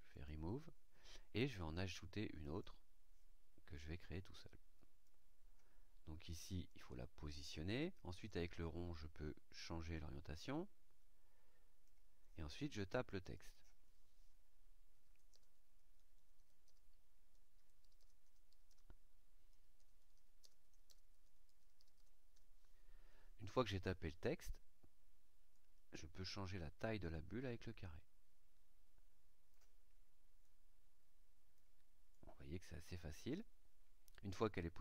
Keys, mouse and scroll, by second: 0.0 click, 2.4 click, 3.7-5.2 drag, 6.6 click, 8.2-12.0 drag, 12.7 click, 14.8-21.9 typing, 25.5-29.7 drag, 30.4-31.7 drag, 32.1-33.5 drag.